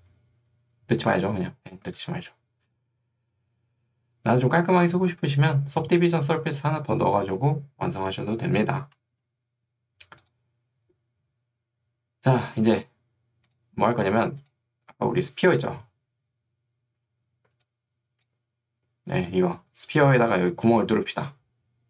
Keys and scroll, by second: 2.0 ctrl+z, 5.2 ctrl+2, 7.4 Escape, 20.0 3.